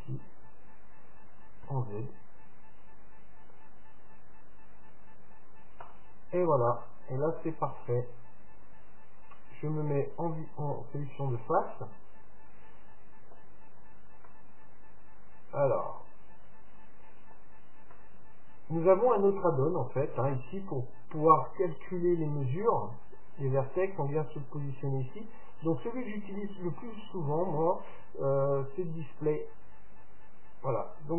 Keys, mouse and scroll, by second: 7.1-9.2 middle drag, 9.9-11.6 drag, 10.8-12.7 middle drag, 13.7-14.3 scroll up 1, 14.3-16.1 middle drag, 17.6-21.2 middle drag, 23.8-25.7 drag, 29.4-31.1 drag.